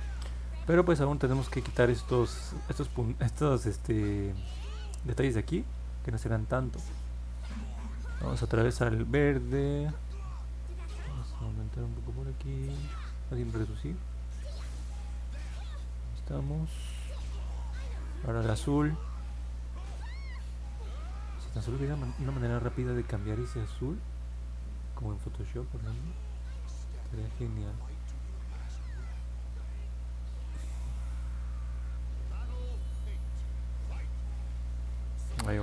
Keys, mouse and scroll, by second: 10.9 click, 11.5 click, 12.0 click, 12.7 click, 13.2 click, 14.4 click, 14.9 click, 15.4 click, 15.9 click, 20.3 click, 20.9 click, 21.4 click, 22.0 click, 22.5 click, 23.0 click, 23.6 click, 24.1 click, 24.6 click, 26.1 click, 26.6 click, 27.3 click, 27.8 click, 31.7-32.2 scroll down 2, 32.4 middle click, 33.6 middle click, 34.0 middle click, 34.4 middle click, 34.8 middle click.